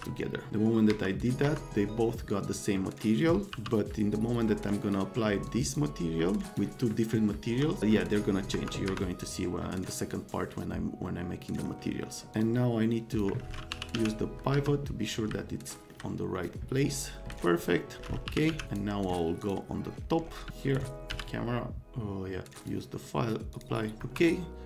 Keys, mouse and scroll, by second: 0.9 F3, 1.1 right click, 1.4 F3, 3.5 n, 4.4 click, 5.5 click, 6.4 click, 8.5 F3, 8.9 F3, 11.0 right click, 12.3 middle click, 13.1 middle click, 13.4-14.4 typing, 14.5 F3, 15.4 middle click, 16.3 middle click, 18.0 middle click, 18.0-19.0 typing, 18.7 right click, 19.4 click, 20.4 z, 21.1 z, 22.6 click, 23.5 click, 24.0 F3.